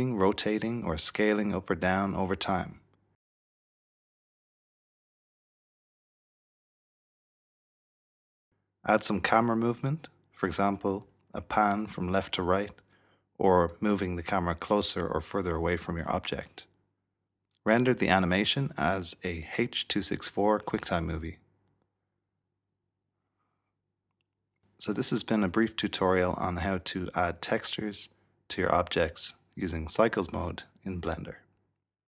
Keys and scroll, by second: 1.0 i, 2.6-6.0 typing, 7.1 i, 10.5-11.2 typing, 13.3 typing, 16.1 typing, 19.4 typing, 20.6-21.4 typing.